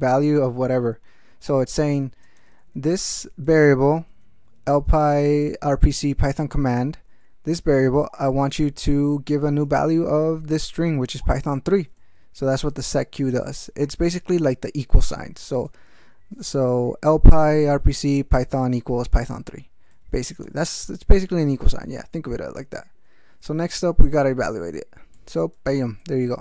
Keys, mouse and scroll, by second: 0.9 ctrl+space, 1.4 ctrl+g, 1.8 ctrl+f, 2.2 ctrl+space, 2.7 ctrl+alt+f, 4.0 ctrl+alt+b, 4.4 ctrl+alt+f, 8.0 ctrl+g, 9.1 ctrl+alt+f, 9.6 ctrl+alt+space, 9.8 ctrl+alt+e, 10.2 ctrl+alt+b, 11.2 ctrl+g, 11.7 ctrl+alt+m, 12.2 ctrl+alt+f, 12.5 ctrl+alt+space, 12.8 ctrl+alt+f, 13.8 ctrl+alt+g, 17.9 alt+space, 19.9 ctrl+d, 20.4 ctrl+x, 20.6 ctrl+s, 23.1 ctrl+e, 25.1 ctrl+x, 25.5 ctrl+e.